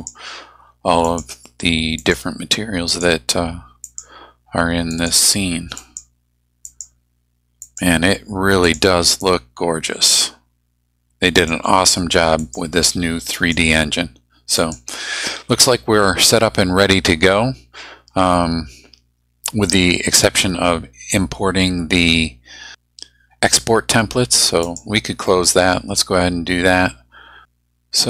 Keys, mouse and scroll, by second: 1.0 click, 2.0 click, 2.9 click, 3.8 click, 4.9 click, 5.8 click, 6.6 click, 7.6 click, 8.6 click, 11.4 click, 12.4 click, 13.3 click, 14.6 click, 24.6 click.